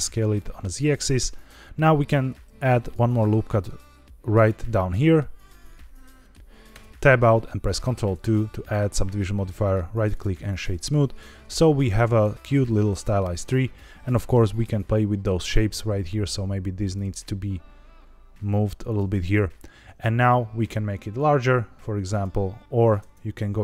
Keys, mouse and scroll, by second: 1.0 click, 2.4 ctrl+r, 4.3 click, 5.2 scroll up 2, 5.6 shift+middle click, 6.6 Tab, 7.8 ctrl+2, 9.6 right click, 10.7-12.6 scroll down 3, 13.1 Tab, 14.0 click, 15.1 l, 15.7 s, 15.8 z, 16.8 click, 17.0 g, 18.8 click, 18.9 Tab, 20.2 s, 22.0 click, 22.9 Tab, 23.4 a.